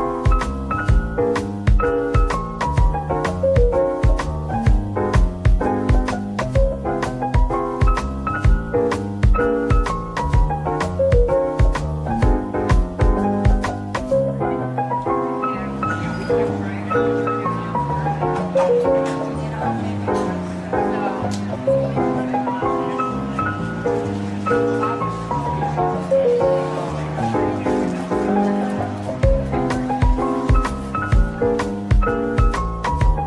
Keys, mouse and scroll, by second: 1.5-2.4 typing, 5.1 typing, 7.7 scroll up 1, 8.6-8.9 typing, 10.3 typing, 13.6-14.8 typing, 15.5 shift+click, 15.7 shift+double click, 16.5 /, 16.9 middle click, 23.0-23.9 typing, 26.4-27.3 typing, 28.7 ctrl+click, 30.1 typing, 31.2 ctrl+click, 32.4 shift+a.